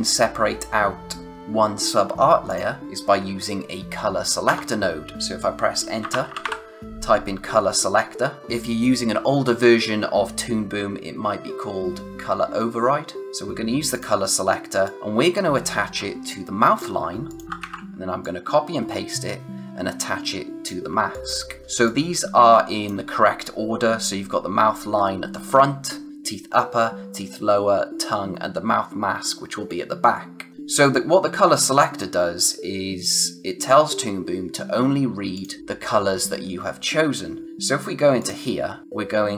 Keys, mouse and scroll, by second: 2.4 click, 4.4 Return, 5.7-6.9 typing, 13.9 click, 17.2 click, 17.4 ctrl+c, 17.6 ctrl+v, 18.2-19.9 drag, 21.1 click, 21.6 space, 21.8 click, 22.1 space, 30.5 click, 35.3 click, 38.1 click.